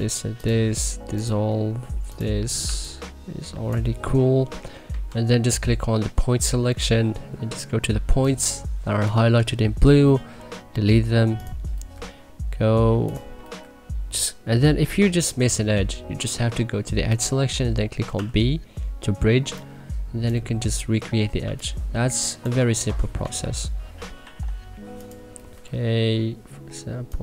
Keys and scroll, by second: 2.6 1, 4.8 w, 10.1 Delete, 18.1 b, 21.4 1, 22.8 c, 23.2 w, 24.1 e, 25.5 Delete.